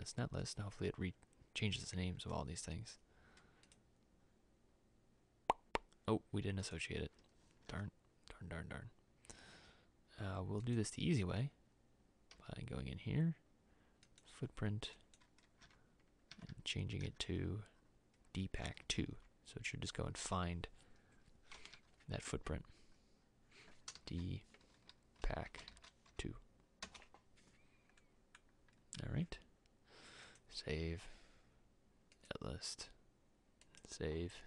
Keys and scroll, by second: 7.8 alt+Tab, 12.4 e, 15.7 alt+Tab, 21.7 alt+Tab, 24.0 shift+d, 25.1-26.8 typing, 26.9 Return.